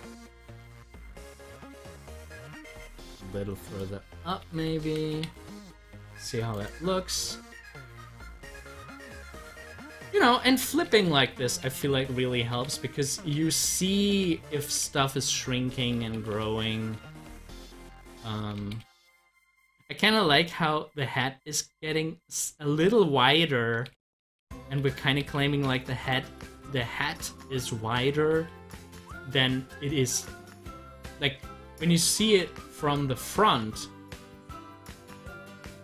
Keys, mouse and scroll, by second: 1.4 scroll down 1, 6.9 scroll down 1, 9.7 Left, 12.6 Left, 17.6 Right, 19.4 Right, 23.7 Left, 32.9-35.8 drag.